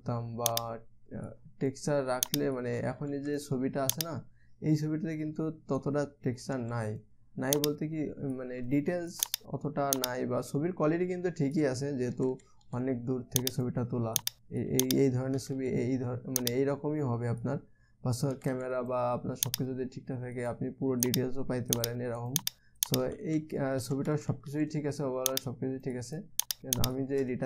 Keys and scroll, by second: 0.0 [, 0.2 [, 0.4 [, 3.4 ], 3.6 ], 3.7 ], 7.0 ], 7.2 ], 9.2 [, 18.9 [, 19.1 [, 23.4-25.0 typing.